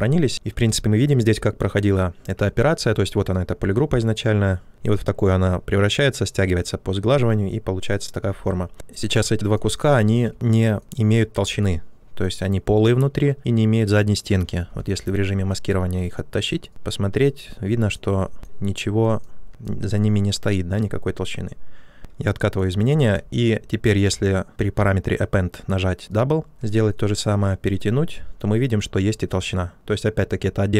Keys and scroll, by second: 14.6 w, 22.0 ctrl+z, 26.9 w.